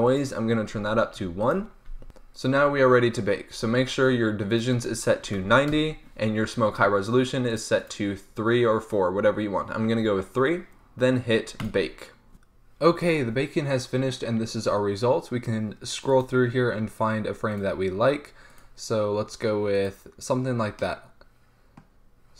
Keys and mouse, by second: 0.0-2.0 drag, 2.0 ctrl+s, 4.4-6.2 drag, 6.2-7.1 middle drag, 7.4-12.5 drag.